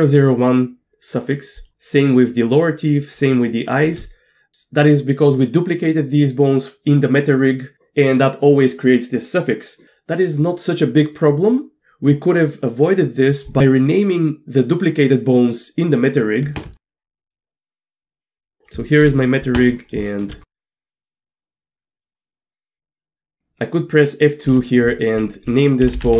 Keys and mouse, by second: 1.6 click, 16.7 Tab, 17.9 click, 19.0 KP_Divide, 20.1 shift+middle click, 20.7 Tab, 21.0 shift+middle click, 22.1 shift+middle click, 22.7 click, 24.5 F2, 25.9 BackSpace, 26.1 BackSpace.